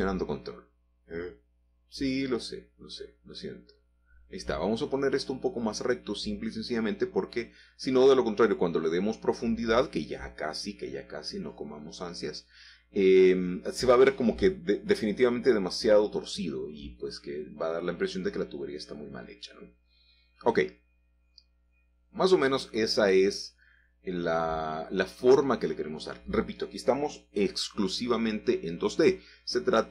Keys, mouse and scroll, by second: 0.0 click, 0.7-1.8 drag, 3.8 r, 4.2 y, 7.7-9.9 ctrl+drag, 9.7 r, 10.6 x, 14.3 ctrl+click, 15.5 g, 16.9 x, 20.0 click, 22.6-26.4 middle drag, 28.1-29.1 drag.